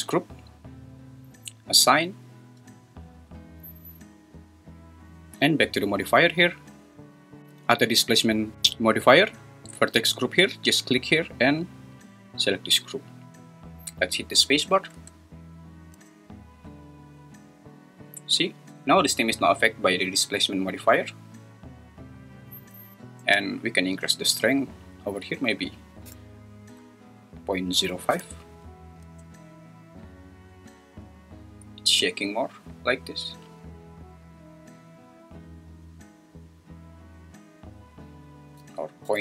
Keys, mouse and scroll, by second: 1.8 click, 6.2 click, 11.0-12.6 drag, 14.9 Tab, 15.9 space, 23.2 space, 24.6-28.5 drag, 29.0 space, 38.5-39.2 drag.